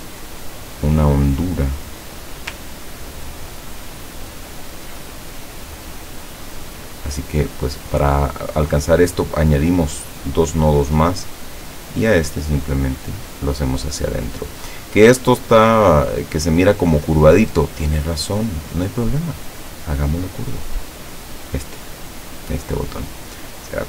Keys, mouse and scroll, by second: 0.5 click, 1.9 click, 2.9-3.6 ctrl+scroll up 2, 4.6 ctrl+scroll down 2, 5.7 click, 12.3-14.8 drag, 15.9 click, 19.4 click.